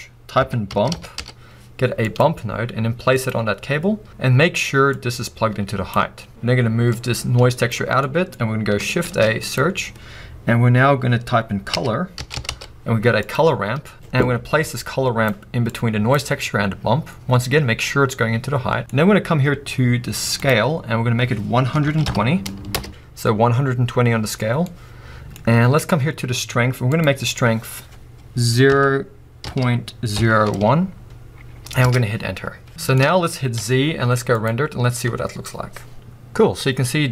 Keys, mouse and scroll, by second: 2.4 middle click, 2.4 shift+a, 3.1-3.6 middle drag, 3.2 click, 3.2 right click, 6.3 click, 13.9 click, 15.8 click, 22.8-32.7 drag, 22.8 middle click, 22.8 right click, 22.9 Return, 32.0 Return, 32.7-34.9 shift+middle drag, 33.4-33.8 scroll up 2, 33.8 z.